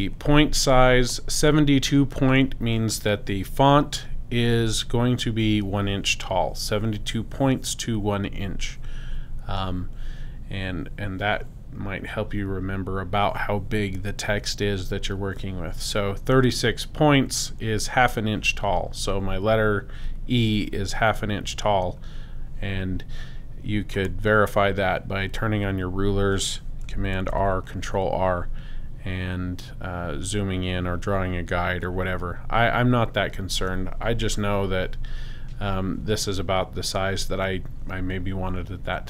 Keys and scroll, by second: 27.2 super+r.